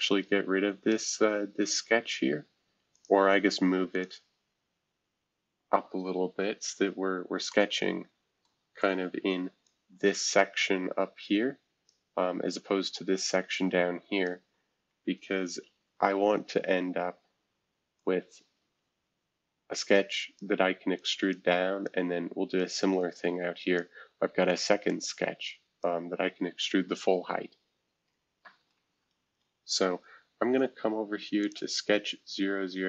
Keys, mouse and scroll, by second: 0.2 scroll down 2, 0.8 scroll down 2, 2.9 click, 3.9 click, 8.4-9.6 middle drag, 9.2 F2, 9.6-11.9 drag, 12.9-14.2 drag, 15.2 shift+F2, 18.0-20.4 drag, 20.9 click, 21.5 click, 22.6-23.8 drag, 24.8 click, 29.2 shift+F2, 30.8 scroll down 1, 31.4 click.